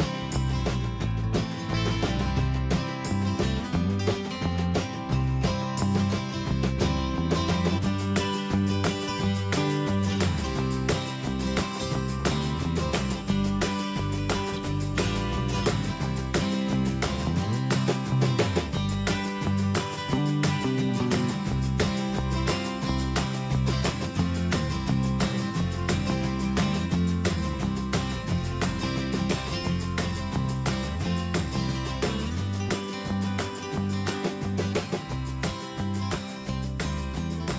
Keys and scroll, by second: 3.2 Return, 4.8 ctrl+t, 7.9 Return, 10.8 ctrl+space, 11.7 ctrl+a, 16.1 ctrl+Return, 17.2 Escape, 18.1 ctrl+a, 24.4 ctrl+Return, 27.8 Up, 32.6 ctrl+a.